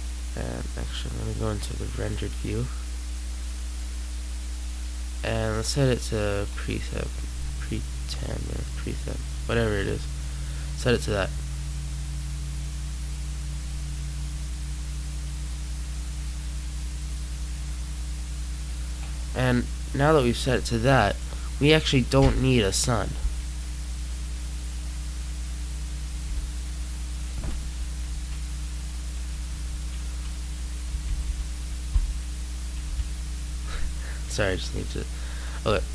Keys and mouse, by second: 15.3-16.9 typing, 18.8 typing, 20.6-21.9 drag, 20.6 typing, 23.0 ctrl+x, 27.4 y, 28.0 a, 29.0 y, 30.8 m, 31.1 o, 34.8 click.